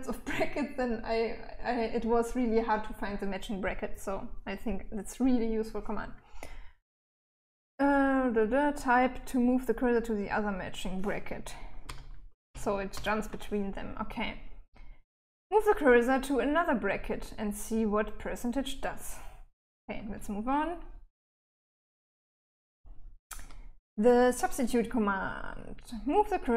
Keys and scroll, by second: 11.1 shift+5, 11.7 shift+5, 12.2 shift+5, 19.2-21.9 typing.